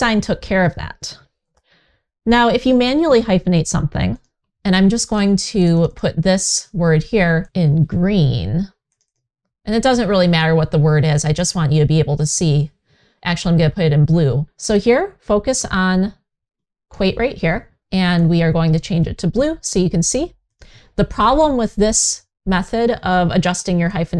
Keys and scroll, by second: 1.2 super+z.